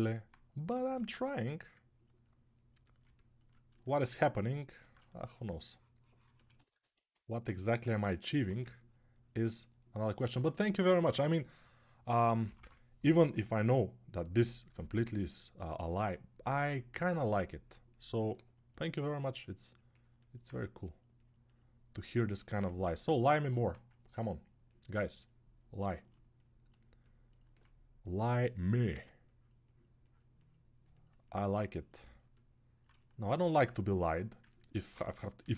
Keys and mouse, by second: 0.7 g, 4.8-13.1 shift+right drag, 7.4 1, 12.2 [, 12.3 [, 23.1-31.9 alt+right drag, 28.7 x, 35.2-35.5 typing.